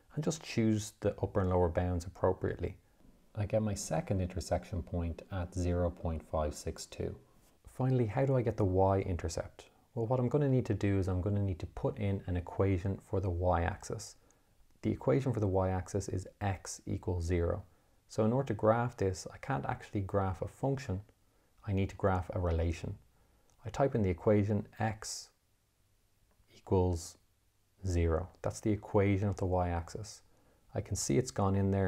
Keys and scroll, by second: 19.5 Menu, 21.6 3, 23.0 2, 25.3 x, 26.8 =, 28.8 0, 30.1 Return.